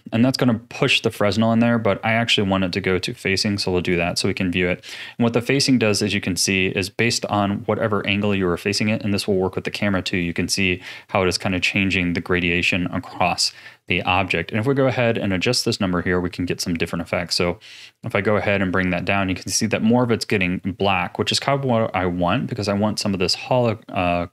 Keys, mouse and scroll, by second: 1.3 click, 5.1-8.1 middle drag, 11.5-13.1 middle drag, 13.1-14.0 scroll up 11, 14.0-15.7 middle drag, 15.7-16.6 scroll up 4, 16.6 middle click, 17.2-20.3 drag, 21.4-24.3 middle drag.